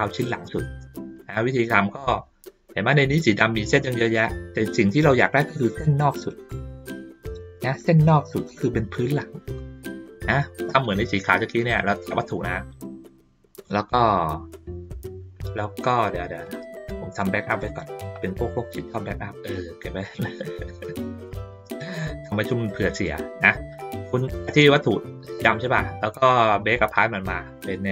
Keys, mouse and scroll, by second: 0.6 ctrl+middle click, 1.3 middle click, 2.5 ctrl+middle click, 2.8-9.9 ctrl+middle drag, 10.1 ctrl+middle click, 10.8-12.3 drag, 15.6 middle click, 16.4-17.2 drag, 18.6-21.2 drag, 24.3-25.5 drag, 26.7 click.